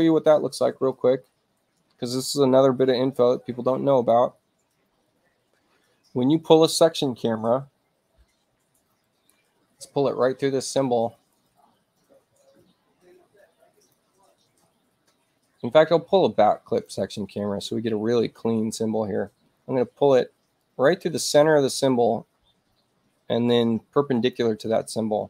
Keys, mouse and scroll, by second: 0.9 click, 3.8 click, 13.7 click, 16.6 click, 20.4 ], 20.5-24.2 drag.